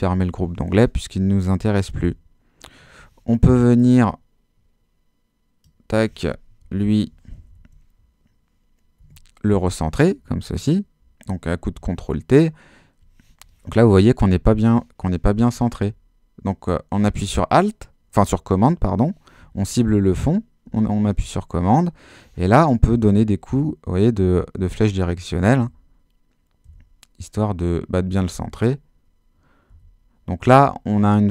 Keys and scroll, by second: 2.0 super+h, 6.7 shift+Left, 7.2 shift+super+Left, 7.5 super+t, 9.1 Escape, 15.8 super+Left, 23.2 super+Left, 28.5 super+Left, 29.7 super+Right, 30.6 super+Left.